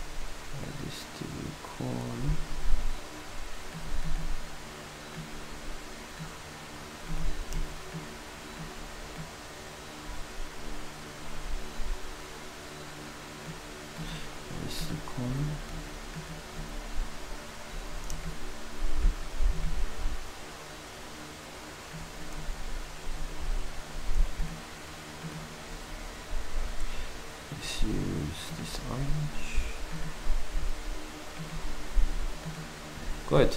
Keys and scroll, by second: 15.2 d, 22.3 d, 28.7 s.